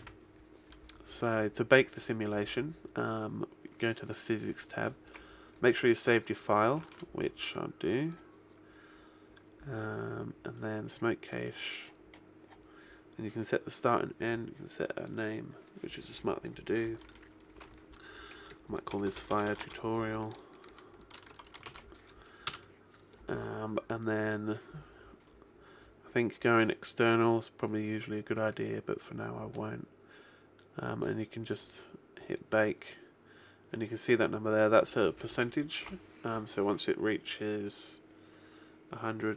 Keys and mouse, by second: 0.0 Escape, 1.0-3.4 middle drag, 3.8 click, 6.8 ctrl+w, 8.2-10.0 middle drag, 10.6 click, 14.9 click, 27.4-29.8 middle drag, 31.4-39.3 drag.